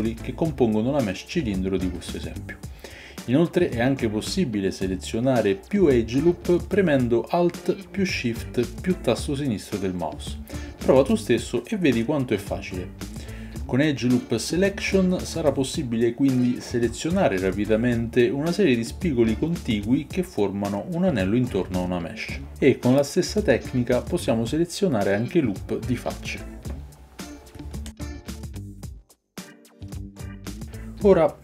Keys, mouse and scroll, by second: 3.5-8.5 alt+shift+drag, 8.5-24.3 middle drag, 24.3-26.3 drag, 26.3-27.8 alt+middle drag, 27.8-29.5 alt+shift+drag, 29.7 alt+shift+click.